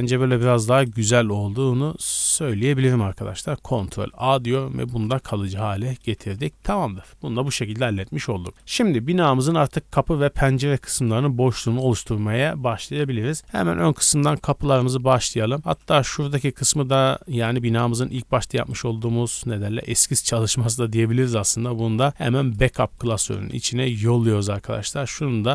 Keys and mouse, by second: 0.8-2.5 middle drag, 4.0 ctrl+a, 4.8-5.2 shift+middle drag, 5.2 Tab, 5.6 middle click, 6.3 Tab, 6.6 a, 6.8 a, 8.5 shift+middle click, 9.5-14.2 shift+middle drag, 14.2 click, 14.3-15.6 middle drag, 15.7-17.0 middle drag, 17.0 n, 18.0 b, 19.9 g, 21.6 m, 23.5 n, 23.9-25.1 middle drag, 25.1 click.